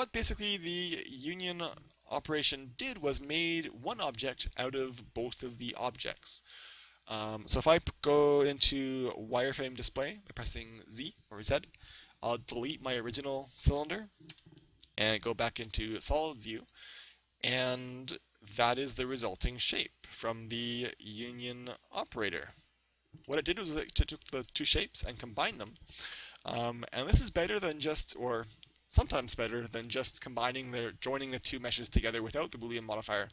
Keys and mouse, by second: 9.4 z, 12.5 right click, 13.8 Delete, 15.6 z, 16.6 right click, 17.2-19.2 middle drag, 23.4-25.2 middle drag, 25.8-27.4 middle drag, 27.5 middle click.